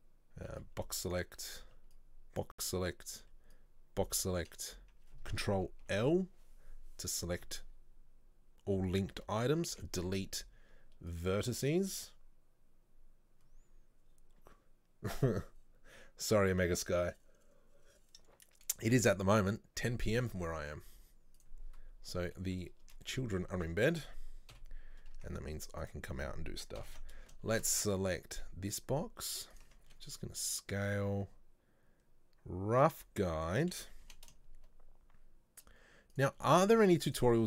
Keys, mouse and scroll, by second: 0.6 b, 1.8 b, 5.9 ctrl+l, 21.4 click, 22.4 middle click, 22.8 scroll up 1, 23.1 shift+middle click, 23.4 scroll down 1, 23.6 Tab, 24.6 KP_7, 25.2 Tab, 25.9 right click, 26.8 ctrl+l, 27.6 shift+d, 29.9 s, 36.5 shift+middle click, 36.8 z.